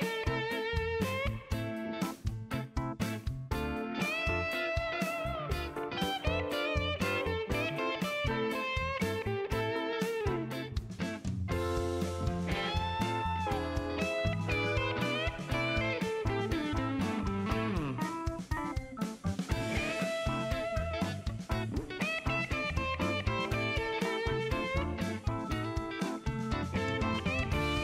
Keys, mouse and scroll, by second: 0.1 click, 0.6 right click, 1.1 click, 2.4 click, 4.4 KP_2, 4.5 KP_0, 5.2 KP_Enter, 6.9-8.8 drag, 9.5 click, 11.2 click, 12.7 KP_1, 12.8 KP_5, 13.0 KP_Enter, 15.0-17.1 drag, 18.7 click, 21.4 click, 23.4 KP_1, 23.5 KP_5, 24.9 click, 25.9 shift+right click, 27.2 shift+click.